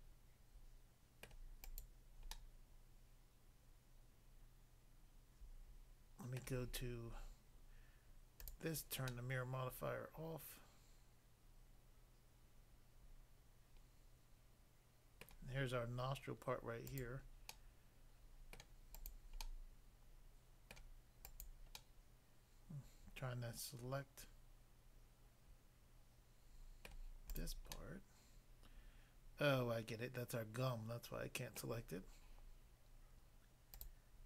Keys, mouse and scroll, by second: 1.3 middle click, 1.7 click, 1.9 click, 2.3 middle click, 6.4 middle click, 8.4 click, 8.5 click, 9.1 middle click, 15.3 middle click, 16.9 click, 17.5 middle click, 18.6 middle click, 19.0 click, 19.1 click, 19.5 middle click, 20.7 middle click, 21.3 click, 21.8 middle click, 26.9 middle click, 27.4 click, 27.7 middle click, 31.6 middle click, 33.8 click.